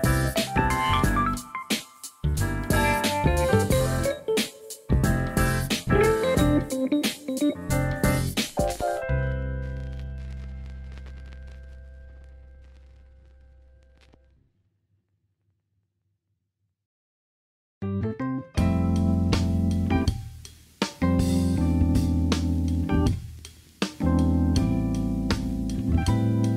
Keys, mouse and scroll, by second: 2.9 KP_3, 3.7 shift+middle click, 8.0 middle click, 9.6 shift+click, 9.9 shift+click, 10.1 shift+click, 10.6 KP_1, 13.2 alt+z, 13.5 shift+middle click, 19.4 KP_3, 21.1 KP_1, 22.7 middle click, 25.2 shift+click, 25.5 shift+click.